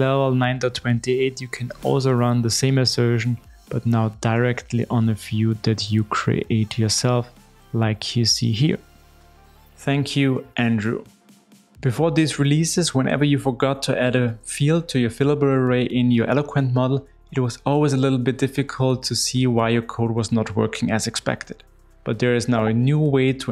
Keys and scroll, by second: 5.2 Return.